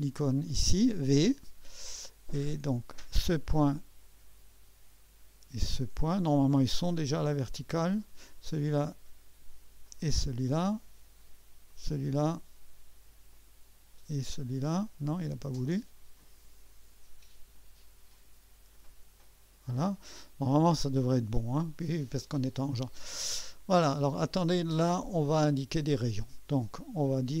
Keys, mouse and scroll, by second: 0.4 click, 3.1 click, 5.7 click, 8.0 click, 9.8 click, 11.7 click, 13.3 click, 16.2 click, 18.7 click, 20.2-20.7 scroll up 2, 20.7-21.6 scroll down 2, 25.5-27.4 drag.